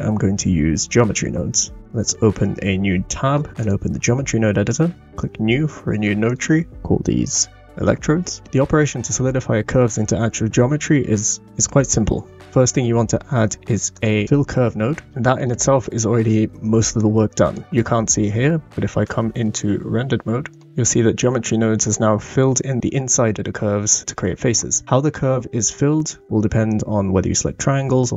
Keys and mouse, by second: 2.0-3.3 drag, 3.5 click, 6.2-8.5 drag, 12.5 shift+a, 12.8 shift+a, 14.6 l, 15.1 click, 15.1 right click, 15.2 middle click, 15.8-16.2 shift+middle drag, 17.2 middle click, 19.2 middle click, 22.5 middle click.